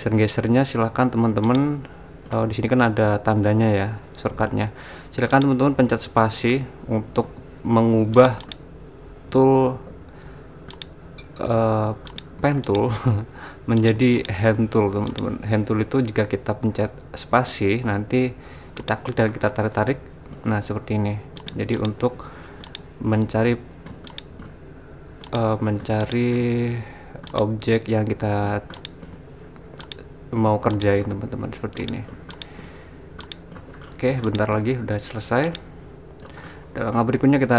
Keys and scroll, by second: 7.3 super+z, 9.3 super+z.